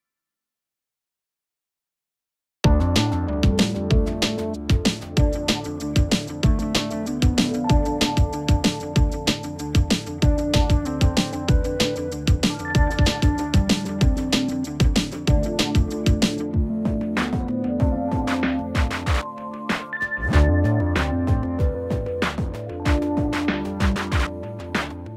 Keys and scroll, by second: 2.6 ctrl+z, 15.6 ctrl+z, 24.4 Escape.